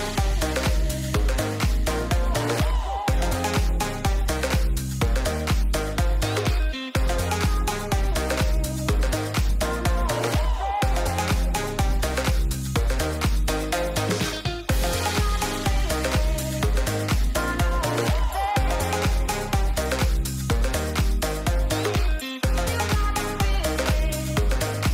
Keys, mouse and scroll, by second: 0.0 click, 0.8 middle click, 1.2 click, 5.3 middle click, 6.7-7.3 drag, 8.0 middle click, 8.6 middle click, 9.0 middle drag, 9.5 middle drag, 10.9 drag, 11.5-13.4 drag, 13.7-16.2 drag, 16.6 click, 17.6-19.0 drag, 19.3 click, 20.0 click, 21.5-23.7 drag, 24.0 click, 24.6 middle click.